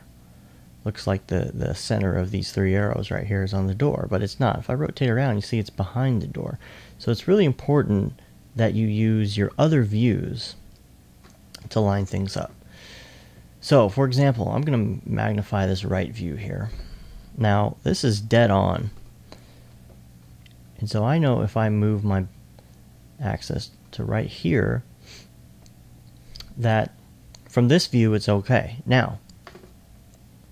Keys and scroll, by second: 17.9 2.